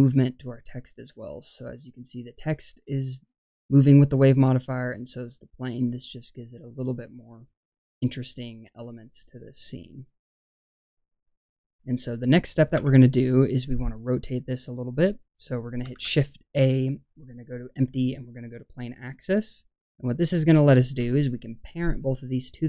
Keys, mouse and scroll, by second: 0.7-1.7 scroll up 2, 12.8 space, 13.4-14.0 scroll down 2, 14.0 scroll down 2, 14.2 middle click, 15.9 shift+a.